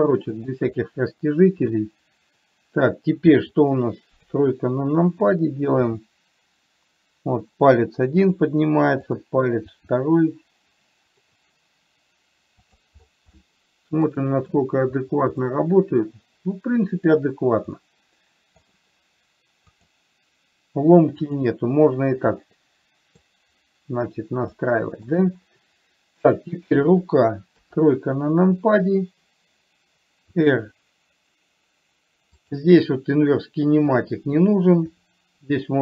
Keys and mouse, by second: 1.1-2.1 middle drag, 4.6 KP_3, 6.3 r, 10.1 r, 13.6 middle click, 14.6 middle click, 15.7-17.6 middle drag, 18.1 middle click, 20.1 click, 23.0-23.6 middle drag, 25.0-25.5 shift+middle drag, 26.6 click, 28.0 KP_3, 30.7 r, 34.3 click, 35.3 r.